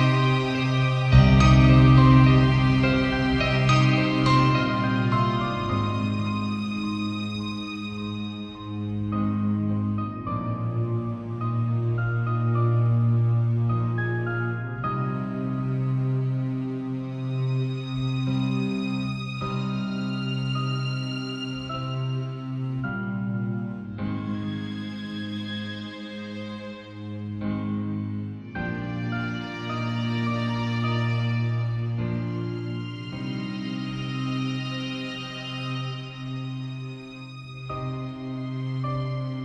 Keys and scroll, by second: 1.7 v, 2.9 shift+super+n, 3.2 shift+super+Return, 3.9 shift+Return, 4.1 b, 10.2 x, 11.5 [, 18.2 ], 20.1 [, 22.3 v, 24.7 shift+super+n, 25.4 shift+super+Return, 26.2 b, 32.2 [, 33.8 [, 36.3 ].